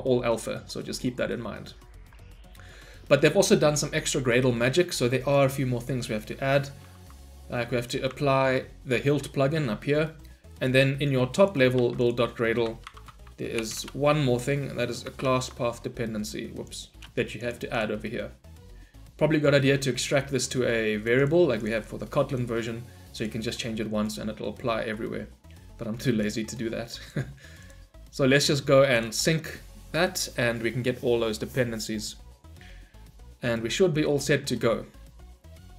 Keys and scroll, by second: 8.2 ctrl+v, 11.0 ctrl+v, 12.9 ctrl+shift+n, 15.2 ctrl+v.